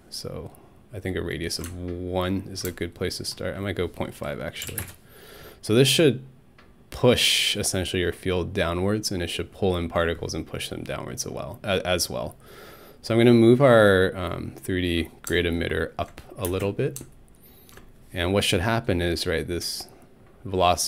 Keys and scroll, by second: 4.4-5.3 typing, 16.5 alt+space.